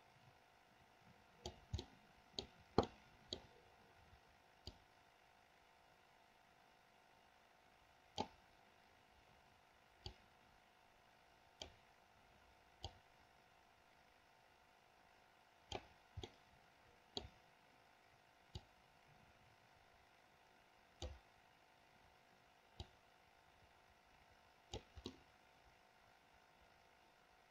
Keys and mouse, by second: 0.0-1.8 drag, 2.0 middle click, 3.3 middle click, 4.8-8.6 drag, 10.3-12.1 drag, 13.2-16.0 drag, 16.5-17.5 middle drag, 18.7 click, 19.0-21.3 drag, 23.0-25.1 drag, 25.4-27.5 middle drag.